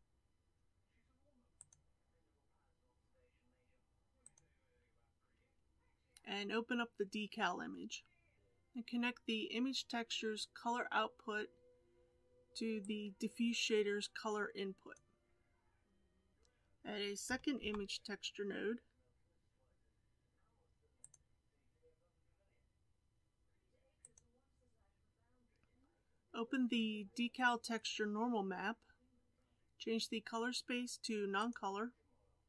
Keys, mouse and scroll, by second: 14.8-21.4 drag.